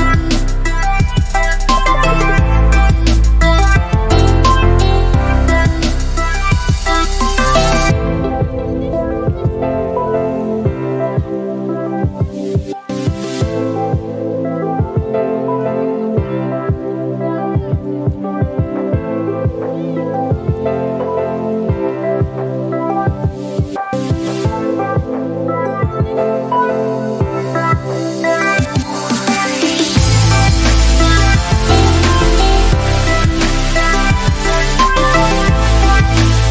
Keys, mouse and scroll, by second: 0.9 scroll down 1, 3.2-3.9 scroll up 1, 4.5 click, 5.4-6.2 typing, 8.4 click, 19.9 click, 27.2 click, 30.2 scroll up 1, 30.3-31.0 scroll down 1, 31.0 click.